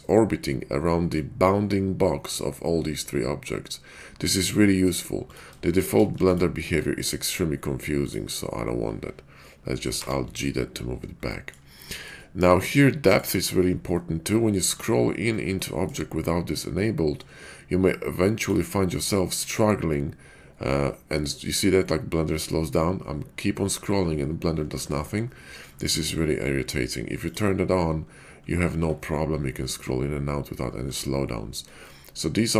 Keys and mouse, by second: 3.4-4.9 middle drag, 5.3 click, 5.8 shift+click, 6.2 x, 6.8-7.1 middle drag, 9.9 alt+g, 11.3 middle click, 11.8 shift+middle click, 13.9-14.3 middle drag, 15.7-16.0 shift+middle drag, 31.9-32.5 middle drag.